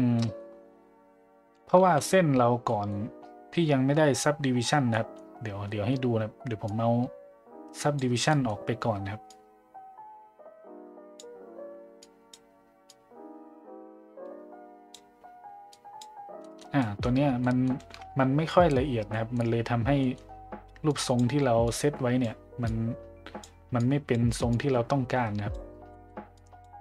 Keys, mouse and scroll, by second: 0.2 middle click, 2.7 middle click, 4.9 middle drag, 6.7-8.0 drag, 8.3 middle click, 9.3-11.2 drag, 12.1-12.4 drag, 12.9-14.9 drag, 15.7 click, 16.5 middle click, 16.8 middle drag, 17.4 middle click, 19.2 middle click, 20.0 middle click, 20.9 click, 21.6 click, 22.7 click, 23.8 click, 24.5-25.5 drag, 25.9 middle click, 26.3 click.